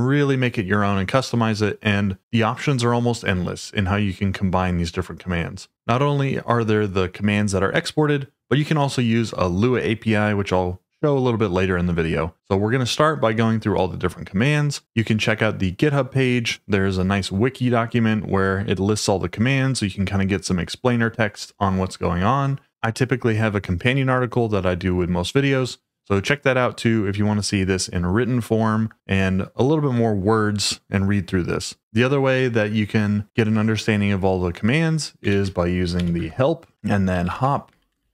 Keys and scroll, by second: 35.3-38.1 typing.